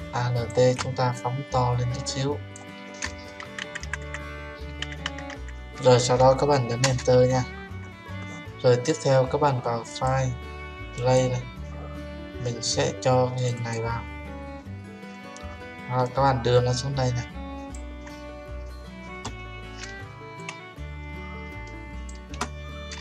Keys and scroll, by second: 6.8 Return, 22.9 Return.